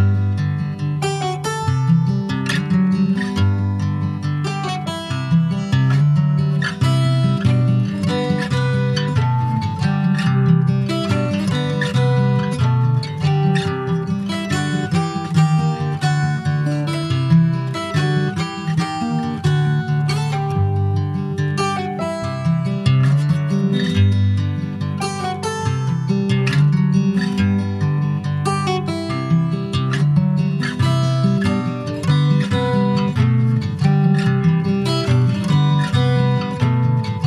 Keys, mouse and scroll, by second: 0.2-1.2 scroll down 7, 1.4 click, 2.3 scroll down 4, 3.3-4.8 drag, 5.8 ctrl+s, 6.2 click, 6.8 /, 7.7 middle click, 8.1 alt+z, 9.6 click, 9.8 middle click, 10.2 ctrl+s, 10.5 click, 11.8-14.4 drag, 15.0 click, 15.4 Tab, 16.3 a, 16.8 s, 17.3 alt+s, 18.4 e, 20.5 alt+s, 28.6 middle click, 29.1 Tab, 29.2 click, 29.6 middle click, 29.8 scroll up 1, 30.0 ctrl+s, 30.4 click, 30.6-32.9 right drag, 32.9 click, 33.7 click, 34.1 alt+middle click, 34.9 alt+z, 35.3 alt+middle click, 35.8 alt+z, 36.2 Tab, 36.5-36.9 scroll up 4, 36.9 shift+middle click.